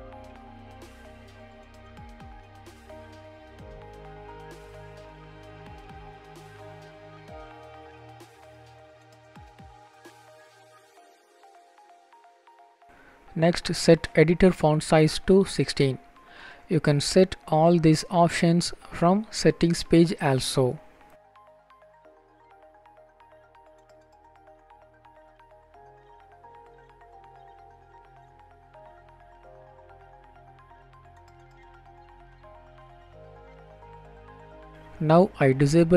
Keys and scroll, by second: 0.6 Delete, 0.8 Delete, 0.9 Delete, 1.0 Delete, 1.2 Delete, 3.6 End, 4.1 ctrl+s, 15.8 BackSpace, 17.1 Down, 17.2 Down, 17.6 Return, 20.8 ctrl+s.